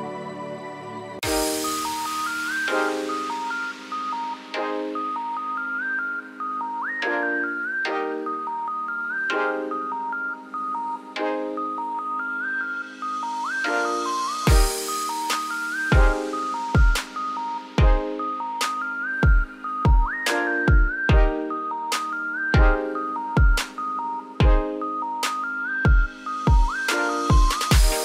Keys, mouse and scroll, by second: 0.3 click, 1.5 click, 2.1 shift+click, 2.7 shift+click, 3.2 shift+click, 4.6 g, 5.9-6.6 scroll up 4, 6.6 click, 7.4-7.7 shift+middle drag, 7.7-8.0 scroll up 5, 8.0 Tab, 8.4 click, 8.6 3, 8.8 click, 9.2 shift+middle click, 9.8 shift+s, 10.1 Tab, 10.9 scroll down 3, 11.6-12.6 shift+middle drag, 12.6 shift+a, 16.1 1, 16.5-17.2 scroll down 2, 17.2 1, 17.4 1, 18.1 `, 18.9-19.5 scroll down 9, 19.5 shift+middle click, 19.7-20.7 scroll up 3, 20.7 Tab, 21.9 shift+middle drag, 22.1-22.5 shift+scroll up 4, 22.6 shift+click, 23.1 g, 27.8 s.